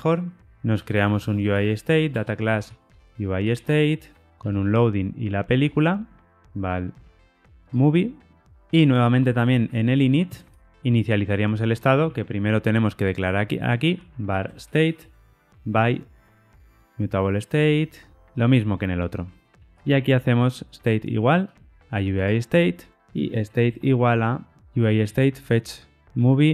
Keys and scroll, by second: 2.1 Return, 4.4 Tab, 6.9 Escape, 16.7 Tab, 22.1 Tab, 24.6 Tab.